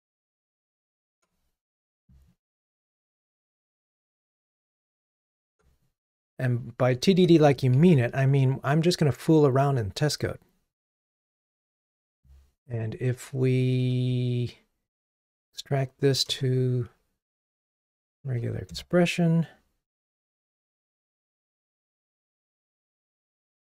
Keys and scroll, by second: 1.3 ctrl+Tab, 5.4 super+c, 5.5 ctrl+Tab, 7.9 super+v, 13.8 alt+super+v, 18.7 Return.